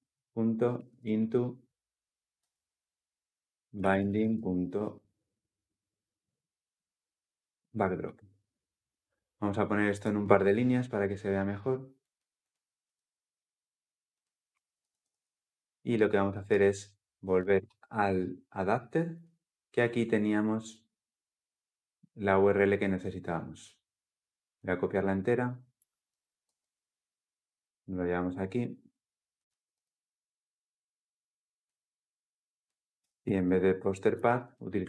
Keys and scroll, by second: 2.1 Return, 7.6 Return, 14.5 ctrl+alt+l, 14.7 ctrl+alt+o, 26.2 ctrl+c, 29.4 ctrl+v.